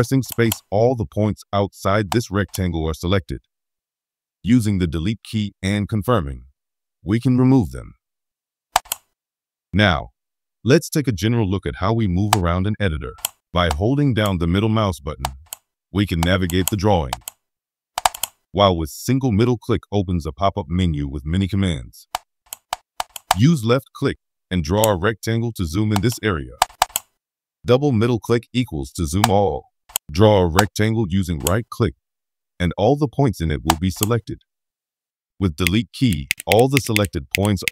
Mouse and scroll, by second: 8.7 click, 12.2 scroll up 1, 12.3 middle click, 13.4-16.6 middle drag, 16.6-16.9 scroll down 1, 18.0 middle click, 23.2-24.7 drag, 26.6 middle click, 26.8 middle click, 29.2 middle click, 30.5 right click, 33.6 right click, 35.6 middle click, 36.3 right click, 36.5 right click, 36.7 right click, 36.9 right click, 37.3 right click, 37.6 right click.